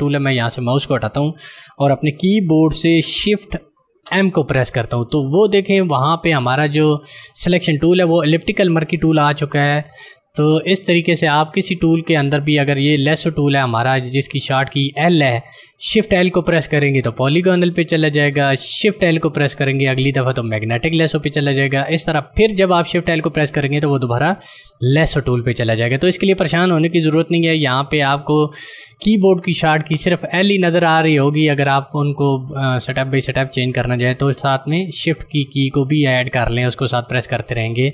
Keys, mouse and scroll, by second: 3.3 shift+Num_Lock, 4.0 shift+m, 12.2 click.